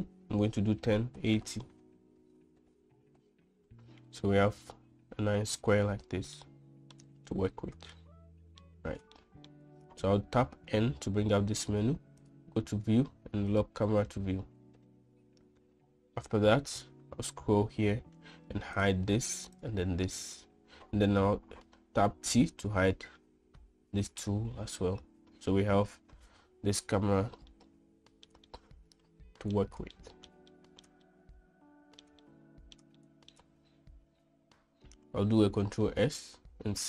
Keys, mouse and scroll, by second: 4.1 middle click, 7.1-7.6 shift+middle drag, 8.5 shift+middle click, 9.9 shift+middle click, 11.3 n, 14.2 click, 15.0 n, 19.4 click, 20.2 click, 22.8 t, 23.5 t, 25.0 t, 28.4-28.9 shift+middle drag, 29.2-30.3 middle drag, 30.6-31.0 shift+middle drag, 31.3 middle click, 31.7-32.8 shift+middle drag, 32.9 middle click, 33.8 shift+middle click, 36.5 ctrl+s.